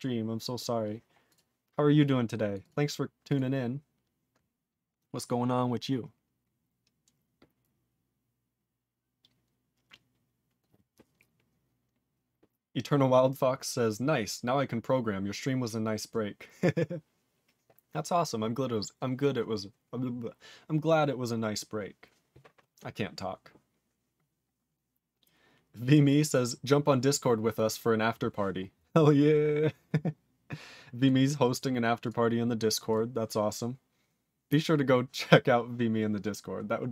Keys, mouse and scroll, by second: 0.3-0.9 scroll down 3, 1.2 click, 1.3 click, 1.7 click, 2.5 click, 2.6 click, 2.6 click, 3.2 click, 3.3 click.